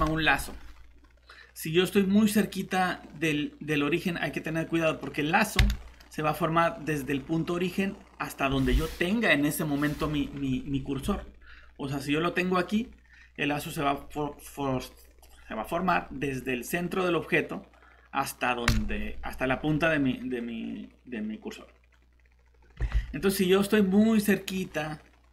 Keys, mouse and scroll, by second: 0.3 Escape, 5.6 s, 11.0 Escape, 18.7 s, 22.8 Escape.